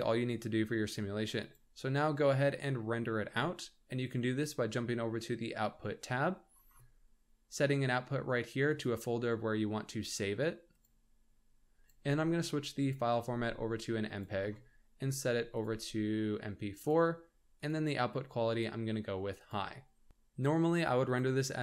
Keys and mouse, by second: 1.4 click, 8.7 click, 11.5-13.8 drag, 15.1 click, 16.4-17.8 drag, 18.4-18.8 drag, 19.4-20.1 drag.